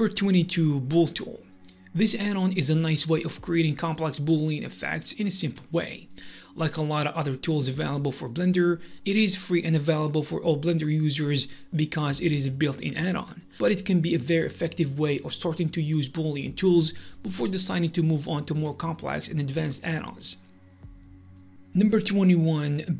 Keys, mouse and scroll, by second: 0.1 middle click, 0.2 scroll up 1, 0.5 shift+middle click, 0.9 click, 1.5 scroll up 1, 1.7 click, 2.5 click, 2.7 click, 3.3 middle click, 3.3 scroll up 3, 3.7 shift+click, 4.6 shift+click, 5.5 middle click, 5.8 shift+middle click, 6.1 z, 6.6 middle click, 7.5 click, 8.1 click, 9.2 click, 9.6 scroll up 1, 9.8 click, 10.6 scroll down 4, 10.9-11.6 scroll up 3, 11.6 click, 11.7-12.2 scroll down 4, 12.2 click, 12.7 scroll up 3, 12.7 middle click, 13.0 middle click, 13.4 scroll down 2, 13.4 middle click, 13.7 alt+m, 14.0 middle click, 15.0 click, 17.1 middle click, 17.2 scroll up 1, 17.3 middle click, 17.5 scroll down 2, 17.7 scroll up 1, 17.9 middle click, 18.4 click, 18.8 click, 18.9-19.5 scroll down 16, 19.8 click, 20.5 middle click, 20.7 middle click, 20.7 scroll down 1, 21.0 middle click.